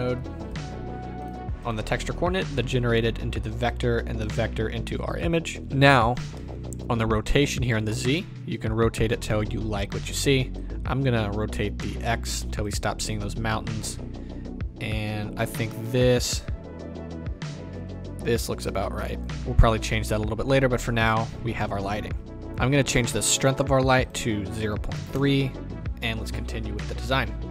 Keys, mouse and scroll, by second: 3.6-22.3 drag, 5.6-7.7 scroll down 2, 25.2-27.5 drag, 25.3 KP_Enter.